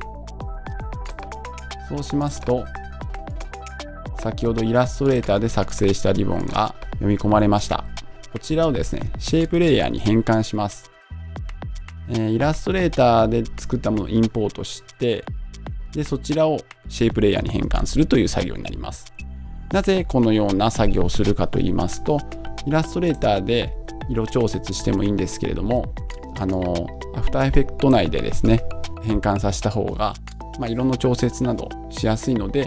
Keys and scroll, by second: 24.1 super+Tab, 25.6 super+Tab.